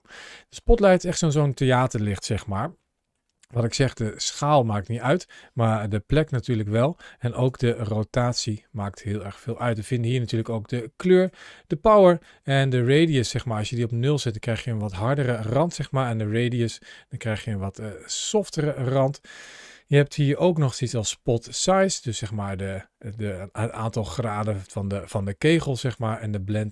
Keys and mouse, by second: 0.4 g, 1.0 click, 2.5 shift+middle click, 3.5 s, 5.7 g, 6.5 click, 7.3 r, 10.2 click, 12.0-18.3 drag, 20.7-25.7 drag, 26.3-26.7 drag.